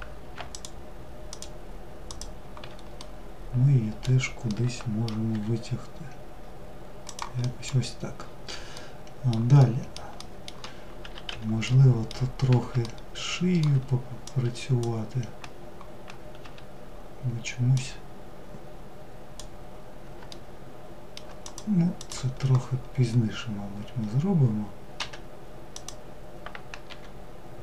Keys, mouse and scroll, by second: 0.1 ctrl+click, 0.9 ctrl+click, 1.7 ctrl+click, 2.6-4.9 middle drag, 4.9 g, 7.0 middle click, 7.5-7.9 scroll down 2, 8.4-10.9 middle drag, 10.9 3, 11.3-13.9 middle drag, 13.9 click, 17.3 drag, 19.9 alt+middle drag, 21.0 click, 21.5 click, 25.4 click.